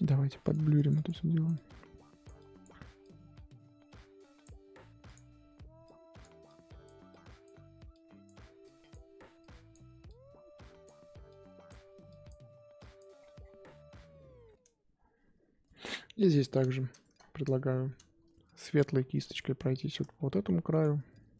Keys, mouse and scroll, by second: 0.1 f, 0.7-13.1 drag, 13.1-13.9 scroll down 10, 13.9-15.3 scroll up 3, 15.4-15.7 scroll up 3, 15.7 middle click, 15.9-16.5 scroll up 1, 16.5 middle click, 16.7-17.2 scroll up 2, 17.2-17.6 scroll down 1, 17.6-18.7 shift+middle drag, 18.7 click, 19.4 middle click, 20.1 f, 20.8 scroll up 2.